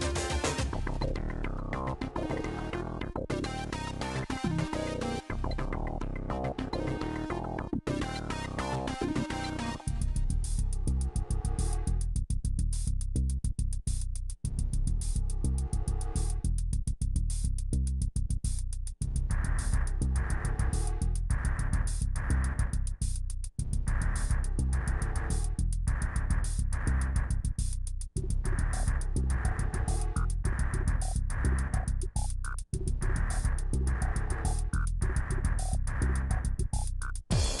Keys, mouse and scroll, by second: 0.4 click, 0.8 KP_1, 1.4 click, 1.8 g, 2.9 click, 3.3 g, 4.0 click, 4.3 g, 5.1 click, 5.4 g, 5.9 middle click, 6.3 click, 7.2 middle click, 9.4-12.3 middle drag, 12.3 scroll up 1, 12.4 scroll down 1, 12.7 shift+middle click, 13.3 click, 13.9 middle click, 14.2 middle click, 14.4 click, 14.6 middle click, 14.9 click, 15.3 middle click, 15.9 click, 16.1 middle click, 16.3 click, 16.3 middle click, 16.5 click, 16.7 middle click, 17.5 click, 17.7 Delete, 18.2 click, 18.3 middle click, 18.5 Delete, 19.1 ctrl+z, 19.3-21.2 right drag, 21.2 Delete, 22.2 click, 22.6 Delete, 22.9 middle click, 23.2 click, 23.6 Delete, 23.8 middle click, 24.0 click, 24.2 Delete, 24.4 click, 24.6 Delete, 24.9 middle click, 25.5 click, 26.2 middle click, 26.8 shift+click, 27.0 f, 27.2 shift+click, 27.6 f, 27.9 shift+click, 28.2 middle click, 28.4 f, 28.5 middle click, 29.0 ctrl+z, 29.7 click, 30.0-34.4 typing, 30.3 shift+click, 30.9 shift+click, 31.5 middle click, 31.8 shift+click, 32.3 shift+click, 32.9 shift+click, 33.4 click, 34.1 shift+click, 34.5 middle click, 34.7 scroll down 1, 34.8-35.8 middle drag, 35.8 shift+click, 36.1-37.6 typing, 36.3 shift+click, 36.9 shift+click, 37.3 shift+click.